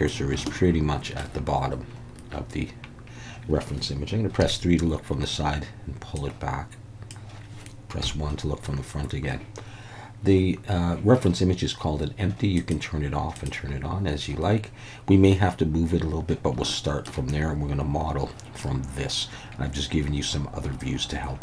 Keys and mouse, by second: 0.4-1.2 shift+middle drag, 4.4 KP_3, 6.2 click, 8.0 KP_1, 12.5 click, 13.3 click, 16.6-17.0 shift+middle drag.